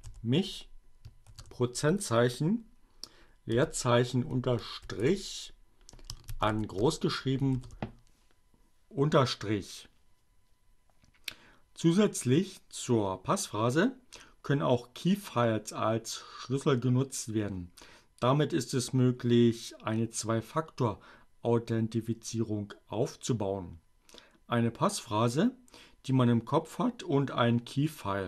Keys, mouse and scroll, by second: 0.0-0.8 typing, 2.1 space, 4.5 shift+a, 4.8 shift+a, 6.6 shift+n, 7.2 shift+-.